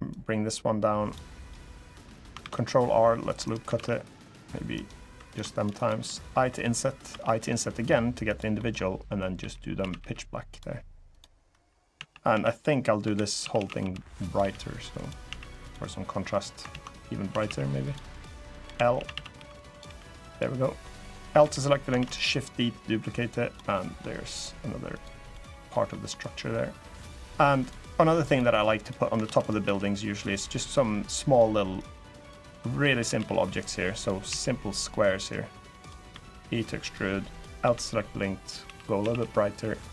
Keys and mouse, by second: 1.1 click, 2.1 ctrl+r, 3.5 ctrl+r, 4.8 3, 5.0 click, 5.2 shift+click, 5.5 shift+click, 6.2 i, 6.8 i, 8.0 click, 8.3 middle click, 9.1 g, 9.5 a, 9.7 g, 10.2 click, 10.9 click, 11.7-15.0 typing, 12.3 click, 14.7 click, 15.4 click, 16.4 ctrl+z, 17.0 a, 17.2 a, 17.6 click, 18.4-19.6 typing, 20.0 click, 20.5 click, 21.1 l, 21.7 shift+d, 21.8-23.3 drag, 23.5 middle click, 24.7 click, 24.9 click, 25.2 middle click, 25.6 middle click, 26.3 middle click, 27.7 middle click, 28.5 click, 29.0 shift+d, 29.4 s, 29.9 click, 30.5 click, 31.6 click, 32.7 s, 32.9 x, 33.7 click, 34.0 s, 34.5 click, 35.0 click, 35.8 e, 36.5 click, 37.1 click, 37.4 l, 38.4 g, 38.7 a, 38.9 g, 39.6 click.